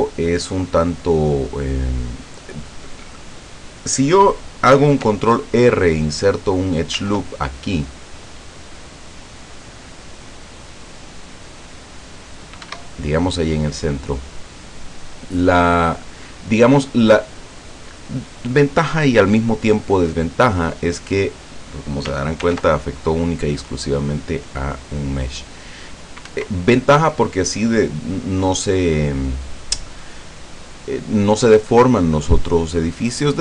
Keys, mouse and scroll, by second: 7.0 ctrl+r, 9.3 scroll up 2, 10.9 click, 12.8 Escape, 15.0-17.8 middle drag, 22.5 ctrl+r, 23.4-23.7 scroll up 1, 24.2 scroll up 1, 25.2 click, 26.4 Escape.